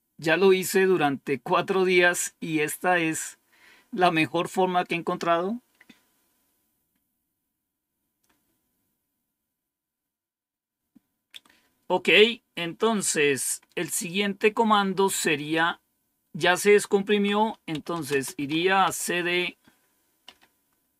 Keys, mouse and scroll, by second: 17.4-18.3 typing.